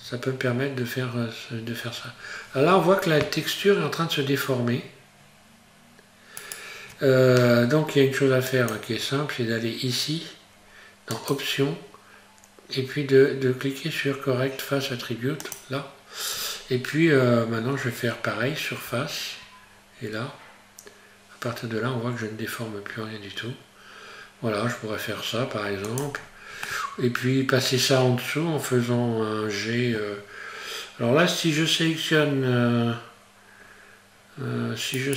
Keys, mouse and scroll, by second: 8.5 click, 15.4 click, 16.9-18.6 scroll up 1, 18.9 s, 26.2-26.6 scroll down 1, 26.6 middle click, 30.3-31.2 scroll up 1, 35.0 right click.